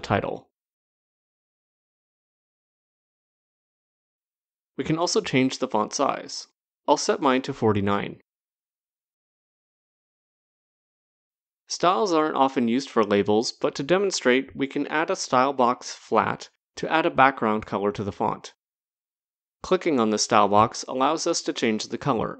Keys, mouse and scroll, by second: 1.5 click, 4.4 click, 6.5 click, 7.2-8.1 typing, 8.6 Return, 10.7-11.5 scroll down 1, 11.5 scroll down 1, 12.5 click, 13.2-13.6 scroll down 1, 16.3 click, 18.0 scroll, 19.3 click, 22.1 click.